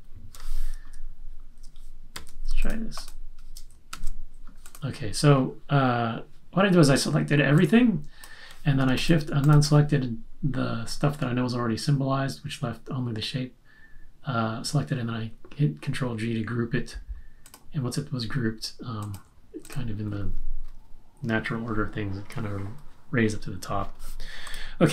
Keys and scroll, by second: 2.1 super+a, 3.9 super+g.